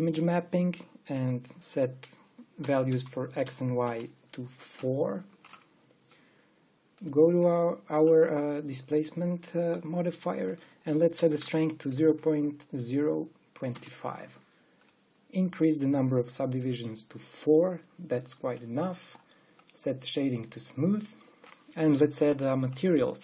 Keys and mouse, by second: 2.9 click, 7.5-9.7 drag, 11.1-12.8 drag, 12.0 KP_0, 14.3 KP_0, 16.7-19.1 drag, 21.0-22.8 drag, 23.0-23.2 drag.